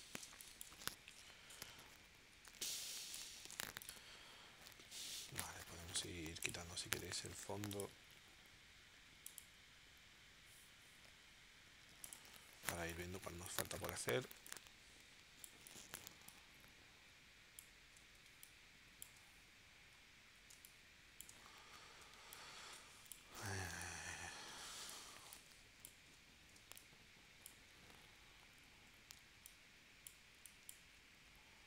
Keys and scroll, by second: 0.3 space, 1.0 super+s, 2.4 space, 3.5 v, 12.7 space, 18.2 space, 20.5 space, 22.1 space, 26.6 space, 29.2 space.